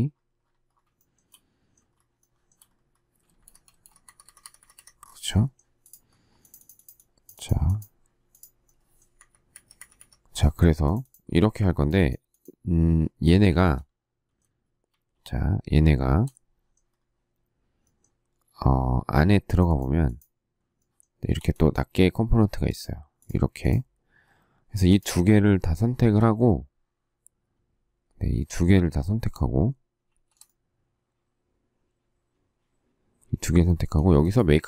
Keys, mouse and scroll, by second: 0.9 shift+middle click, 1.9 shift+scroll, 2.2 shift+middle click, 3.2 space, 3.4 Escape, 3.7 space, 4.0 Escape, 9.1 Escape, 9.5 Escape, 13.4 shift+middle click, 14.8 shift+s, 20.8 shift+middle click, 25.6 shift+click, 28.3 shift+s, 30.0 shift+q, 33.6 shift+middle click.